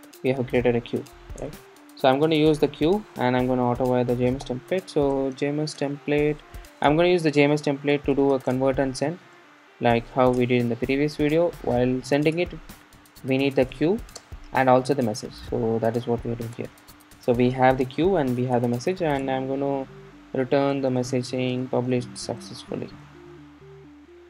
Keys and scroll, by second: 6.9 Return, 16.5 Return.